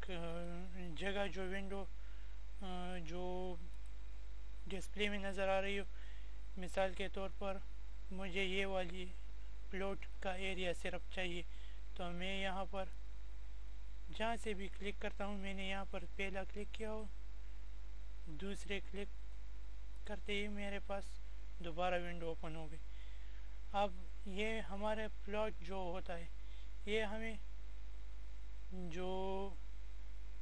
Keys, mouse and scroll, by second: 0.3 click, 3.7 click, 12.4 click, 17.1 click, 28.0 click.